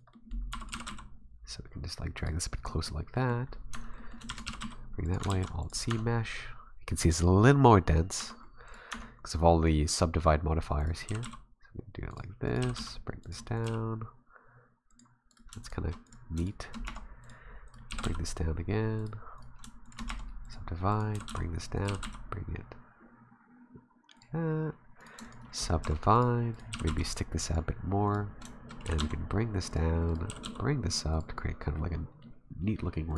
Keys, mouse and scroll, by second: 0.1 middle click, 0.2 r, 0.3 scroll down 1, 0.5 e, 0.7 g, 2.7 middle click, 2.9 r, 3.1 middle click, 3.5 scroll down 2, 3.7 Tab, 4.0 middle click, 4.3 shift+d, 4.5 g, 5.3 alt+c, 5.9 Tab, 8.2 Tab, 8.7 right click, 8.9 Tab, 9.2-10.8 scroll up 1, 10.8 right click, 11.1 g, 12.5 right click, 12.6 g, 13.6 right click, 13.7 g, 15.3 right click, 15.6 shift+right click, 16.1 right click, 16.4 shift+right click, 16.8 w, 17.7 right click, 17.9 g, 19.4 right click, 19.8 shift+right click, 20.1 w, 20.9 right click, 21.1 g, 21.9 g, 25.0 right click, 25.2 shift+right click, 25.8 w, 26.5 right click, 26.7 g, 28.1 right click, 28.8 g, 30.1 right click, 30.3 g, 31.5-31.8 scroll up 5, 31.8 middle click, 32.6 middle click, 33.1 right click.